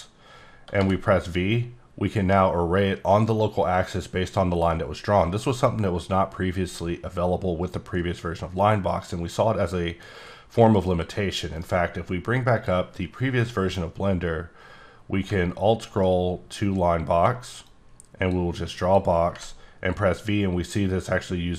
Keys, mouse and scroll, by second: 0.8 v, 1.7-4.5 scroll up 4, 10.9 click, 11.5 right click, 12.5 click, 13.4 middle click, 14.1-15.2 scroll down 1, 15.4-15.9 alt+scroll up 1, 15.9-16.5 alt+scroll down 2, 16.6 alt+scroll down 2, 16.9 alt+scroll, 17.0 alt+scroll up 1, 17.7 click, 18.8 click, 19.3 v, 20.7-21.3 scroll up 2, 21.3-21.5 scroll down 1.